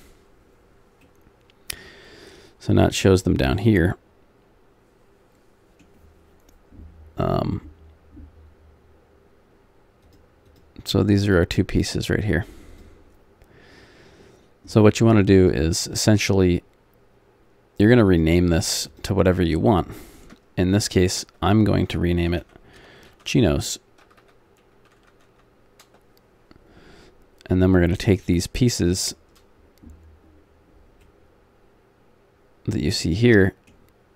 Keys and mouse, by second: 1.0-2.9 middle drag, 3.3 middle click, 10.0-20.9 drag, 20.9 BackSpace, 21.0 BackSpace, 21.5 BackSpace, 21.9 BackSpace, 24.2 BackSpace, 28.0-31.0 drag, 31.0-33.0 middle drag.